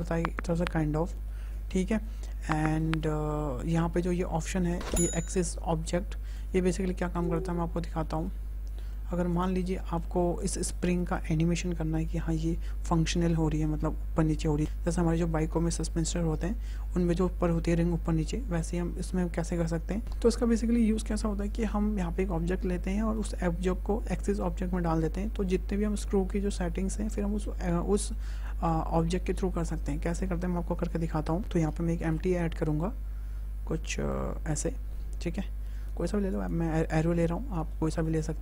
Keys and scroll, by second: 31.8 shift+a.